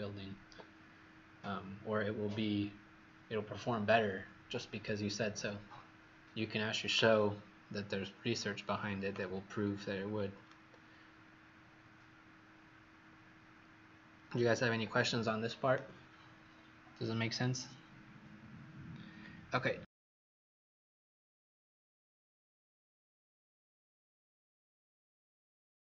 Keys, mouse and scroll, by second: 9.8-10.4 scroll down 3, 10.4 right click, 20.0-20.8 scroll down 1, 21.2-25.8 scroll up 1.